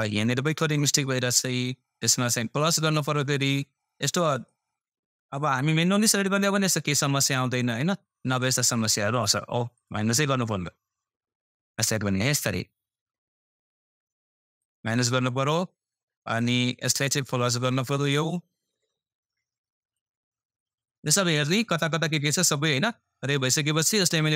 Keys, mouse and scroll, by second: 0.2 scroll up 1, 6.5-24.3 drag.